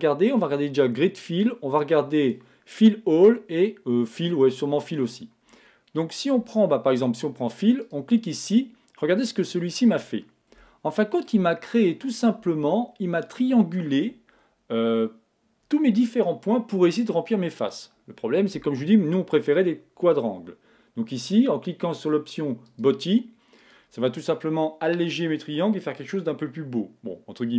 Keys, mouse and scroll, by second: 10.6-12.5 middle drag, 22.7-25.6 drag.